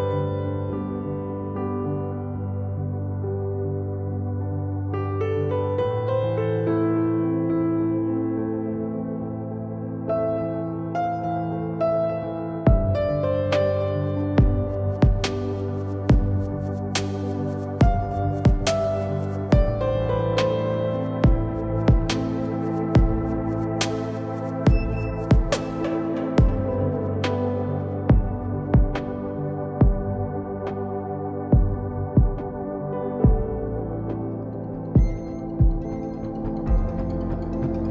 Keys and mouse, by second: 0.2 z, 8.3 Tab, 8.7 Tab, 9.8 Tab, 10.7 z, 11.1 c, 12.9 click, 13.3 x, 13.8 z, 14.2 Tab, 17.0 Tab, 17.8 a, 20.8-22.1 drag, 22.1 s, 24.5 ctrl+KP_1, 29.8 ctrl+Tab, 32.1 g, 34.1 a, 34.2 a, 34.5 s, 36.8-37.9 drag.